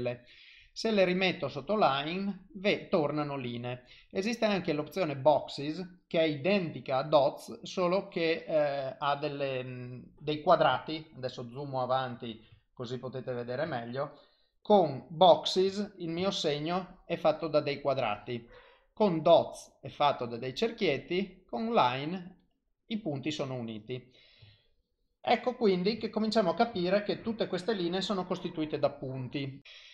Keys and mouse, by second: 3.9 click, 11.4 shift+middle click, 12.6 ctrl+middle click, 13.8 shift+middle click, 14.8 ctrl+middle click, 15.3 shift+middle click, 15.8 ctrl+middle click, 16.3 shift+middle click, 17.8 click, 20.6 click, 24.6 ctrl+middle click, 25.6 ctrl+middle click, 26.1 shift+middle click, 26.6 shift+middle click, 26.9 ctrl+middle click, 27.3 shift+middle click, 29.6 click.